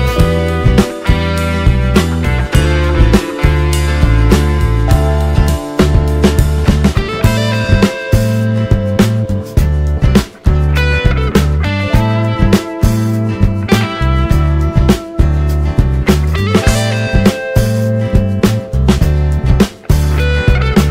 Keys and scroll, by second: 6.5 space, 8.2 r, 9.2 ctrl+space, 13.5 ctrl+space, 17.2-18.8 typing, 20.2-20.9 typing.